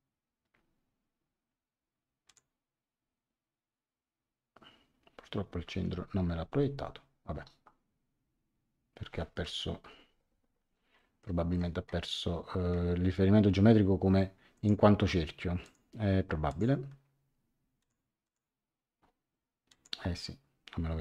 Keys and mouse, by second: 2.2 click, 5.6 Escape, 9.8 F6, 10.9 middle click, 14.5 click, 15.6 click, 17.8 click, 19.6 click.